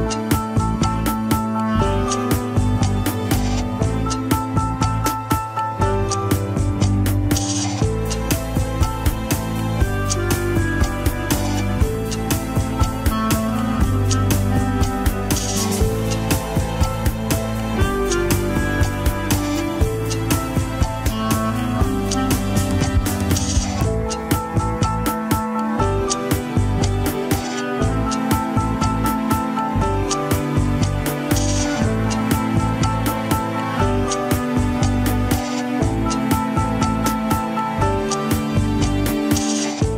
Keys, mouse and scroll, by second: 0.3 click, 0.5 click, 1.2 click, 1.5 click, 2.4-4.3 middle drag, 4.3 scroll down 2, 4.5 KP_3, 4.9 alt+z, 6.0 c, 16.3 alt+z, 16.6-18.7 middle drag, 18.7 Tab, 19.9 click, 21.2 click, 21.8 alt+z, 22.2 alt+z, 22.4 scroll up 2, 22.7-25.2 middle drag, 25.3-27.1 drag, 27.1 middle click, 27.4 scroll down 1, 27.8-28.8 drag, 28.8 middle click, 29.3-30.4 drag, 30.4 middle click, 30.7-31.1 scroll down 2, 31.1 click, 32.0 middle click, 32.7 click, 33.2 middle click, 33.7-35.3 drag, 35.5 scroll up 1, 35.9-37.1 middle drag, 37.1 scroll up 2, 37.3 shift+middle click, 37.9-39.9 drag.